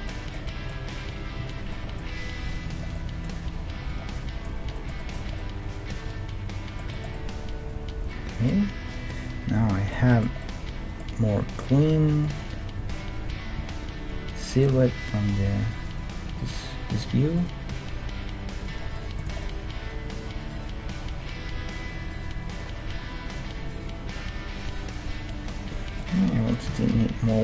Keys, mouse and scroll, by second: 0.9 middle click, 2.3 g, 3.5 g, 5.2 Tab, 6.9-9.0 middle drag, 9.2-12.1 middle drag, 11.9 Tab, 12.2-14.8 right drag, 13.5 g, 17.0-19.1 right drag, 17.7 g, 19.1-21.1 middle drag, 19.3 Tab, 25.5-27.4 middle drag, 26.7 KP_1.